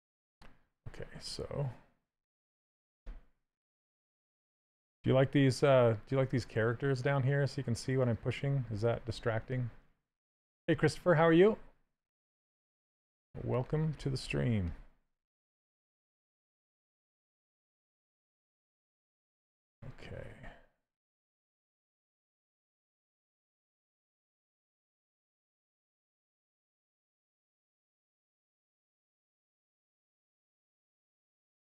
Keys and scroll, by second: 2.7 ctrl+z, 11.7 s, 20.1 s, 26.6 s.